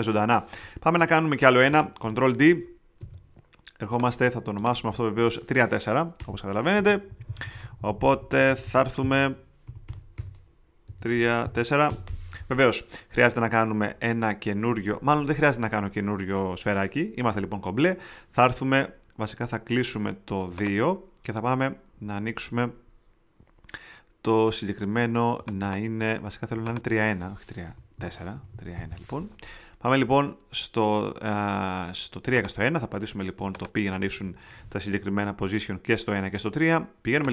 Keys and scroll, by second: 2.9 alt+super+j, 6.1 Return, 6.7 Left, 7.0 Right, 9.6 Delete, 10.6-11.9 typing, 27.6 Return, 27.9 Right, 28.3 BackSpace, 28.5 i, 28.7 Return, 34.2 p.